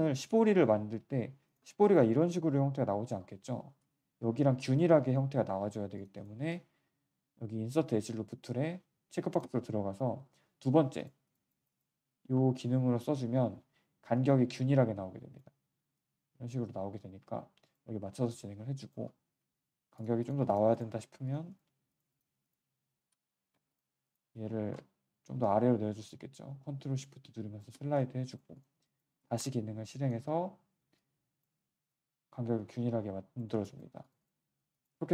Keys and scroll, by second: 3.8 z, 5.8 q, 19.4 z, 23.0 z, 23.5 q, 24.4 w, 28.4 q, 33.8 q.